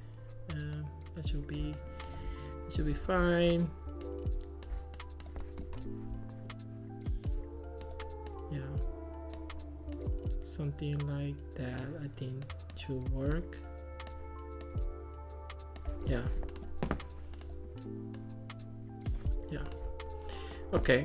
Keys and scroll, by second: 3.1 super+z.